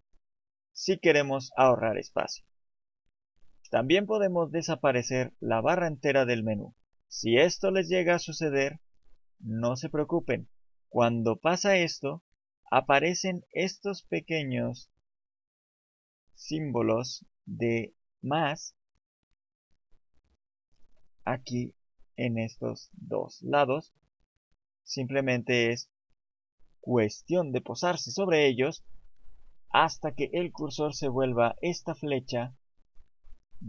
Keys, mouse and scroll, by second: 0.2 right click, 4.7 click.